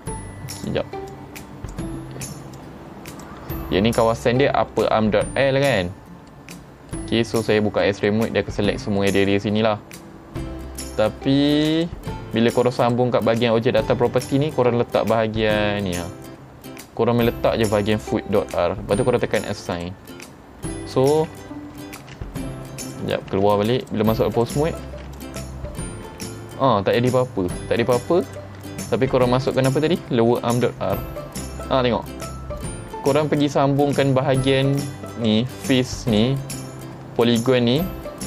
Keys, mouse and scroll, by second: 0.6 click, 1.1 click, 2.6 click, 5.7 middle click, 6.6-6.9 scroll down 4, 6.9 middle click, 7.8 middle click, 9.0 middle click, 11.8 click, 12.8 click, 14.1 middle click, 14.2-15.8 scroll down 5, 15.8-16.6 scroll down 4, 17.9 click, 19.8 click, 20.5 scroll down 3, 22.0 ctrl+Tab, 22.8 right click, 23.4 Tab, 23.9 click, 24.4 click, 24.9 ctrl+Tab, 25.2 click, 26.2 r, 28.3 right click, 28.8-29.1 shift+middle drag, 29.5 click, 30.7 r, 33.4 click, 33.9 click, 34.8-35.3 drag, 35.7-36.2 drag, 36.5-37.2 drag, 37.5-37.8 drag.